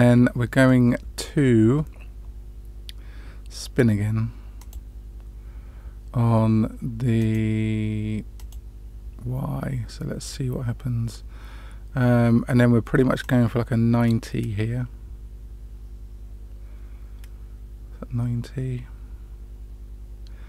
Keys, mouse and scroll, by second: 4.6 click, 7.1 click, 8.3 click, 13.2-20.4 drag.